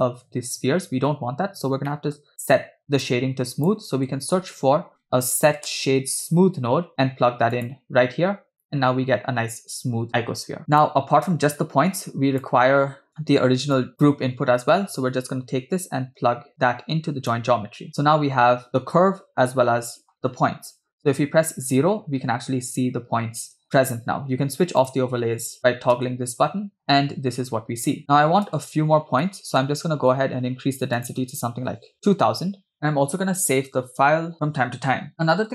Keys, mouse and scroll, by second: 1.9 middle click, 2.5 click, 3.1 click, 4.2 shift+a, 10.6 click, 10.6 scroll down 3, 11.6 click, 13.8 click, 15.3 click, 15.5-17.9 drag, 18.0 scroll down 3, 21.0 KP_0, 21.9 space, 23.5 space, 24.8 click, 26.0 space, 28.1 space, 28.5 space, 29.2 middle click, 30.0-30.9 scroll up 5, 31.0-32.7 drag, 32.1 0, 32.8-34.0 scroll down 2, 35.3 click, 35.3 space.